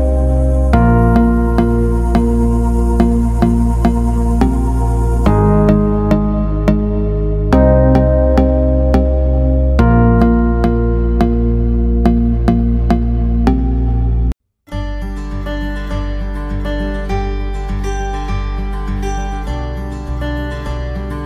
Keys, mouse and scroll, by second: 7.9 right click, 12.5 click, 21.1 click.